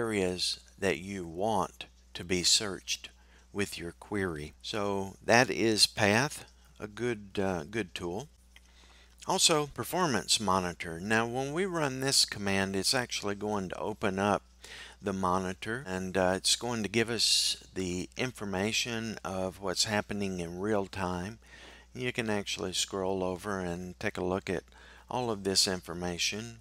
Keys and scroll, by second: 9.2 typing.